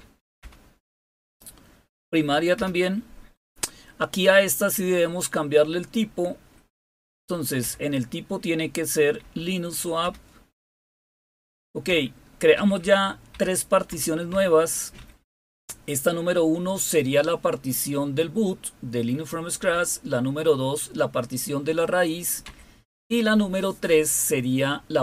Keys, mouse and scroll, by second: 0.4 Return, 2.5 Return, 6.7 Right, 7.6 Return, 9.2 Up, 10.0 Return, 11.9 Down, 12.5 Up, 12.8 Up, 13.3 Up, 13.9 Down, 14.3 Down, 15.0 Up, 15.2 Up, 19.6 Down, 22.4 Down.